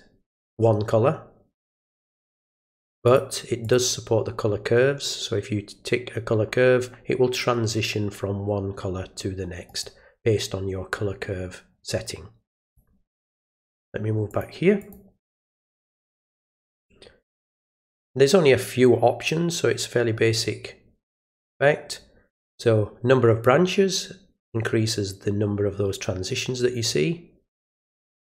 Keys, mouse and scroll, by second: 3.0 click, 3.6 click, 9.6 right click, 12.6 click, 13.6 click, 14.3 click, 14.8 click, 16.1 click, 21.2 click, 23.4-28.2 drag.